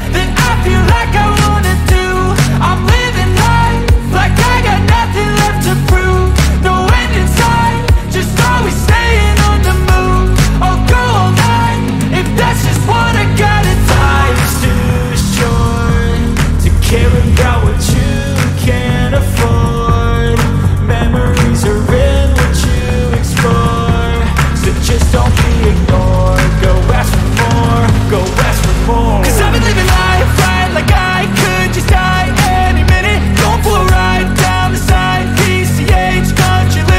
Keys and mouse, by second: 0.0 click, 2.3-3.2 drag, 8.8 ctrl+click, 9.4 click, 10.3-11.1 ctrl+shift+drag, 12.7-15.9 ctrl+shift+drag, 16.1 ctrl+shift+click, 16.4 ctrl+shift+space, 18.0 click, 19.1-19.7 drag, 22.2 Delete, 24.0 click, 26.4 click, 27.4 click, 31.6 ctrl+shift+f, 34.5 click.